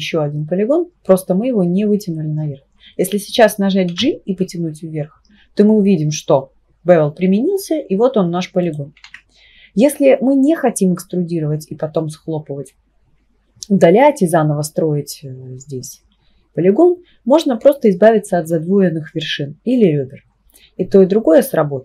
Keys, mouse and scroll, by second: 3.9 g, 9.1 ctrl+z.